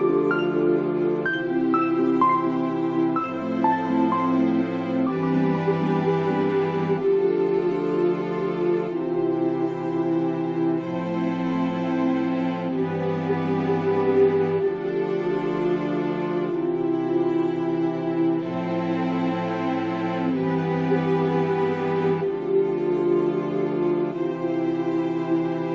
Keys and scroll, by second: 2.4 space, 10.6 ctrl+z, 24.6 space.